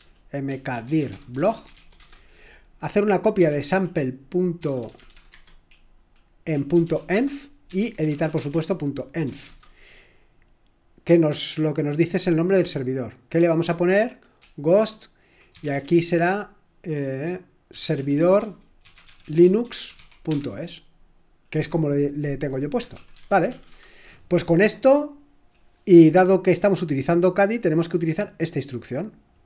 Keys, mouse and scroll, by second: 0.0-9.5 typing, 12.6-16.2 typing, 17.5-20.5 typing, 22.1-24.0 typing, 28.4 click, 29.3 click.